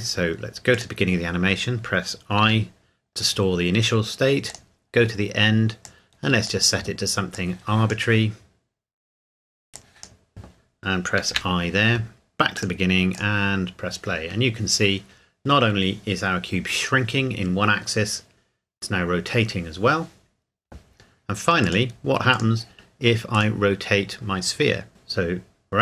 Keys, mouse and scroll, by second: 0.7 click, 4.5 click, 12.6 click, 21.6 click, 23.3 right click.